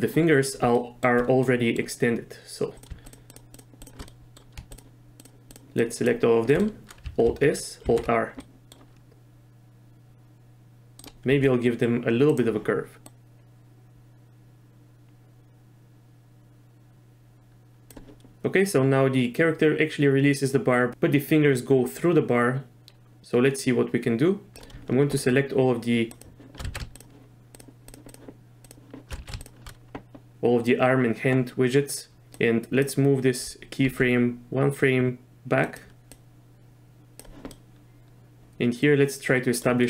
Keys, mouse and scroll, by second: 0.7 shift+middle drag, 1.5 middle drag, 2.7 click, 3.1 shift+drag, 3.3 shift+click, 3.5 shift+click, 4.1-4.4 middle drag, 4.7 shift+drag, 5.2 shift+click, 5.5 shift+drag, 6.0 shift+drag, 6.6 middle click, 7.4 alt+s, 8.0 alt+r, 8.4 middle drag, 9.1 s, 11.3 s, 13.1-17.9 drag, 18.3-24.6 drag, 26.2-26.6 shift+drag, 26.7 ctrl+z, 27.0-28.0 shift+drag, 28.6 shift+click, 29.3 ctrl+z, 32.3-32.8 drag, 33.8 g, 36.2 click, 37.5-39.6 middle drag.